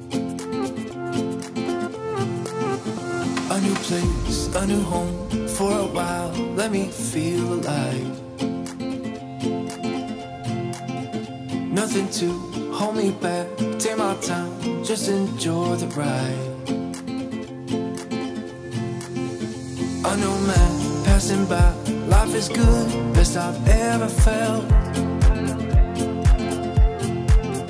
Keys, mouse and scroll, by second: 1.9 click, 5.8-7.7 ctrl+drag, 9.3-11.1 typing, 12.1-27.4 drag, 27.5-27.6 drag.